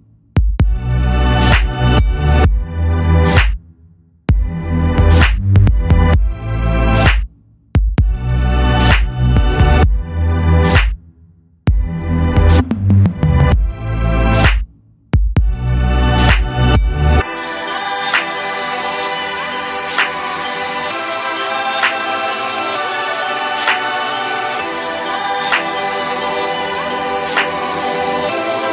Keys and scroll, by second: 12.6 ctrl+g, 13.4 ctrl+g, 17.2 ctrl+z.